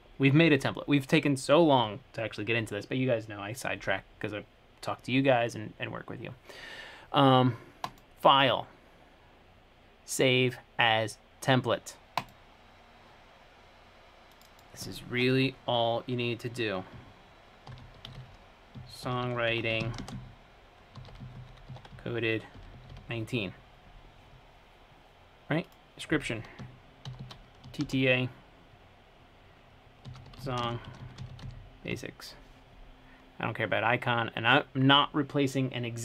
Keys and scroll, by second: 17.7-23.4 typing, 27.1-27.9 typing, 30.1-32.6 typing.